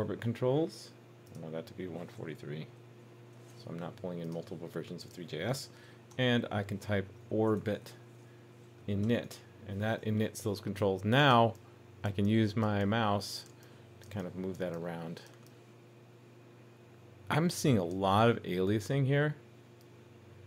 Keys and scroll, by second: 10.0 super+s.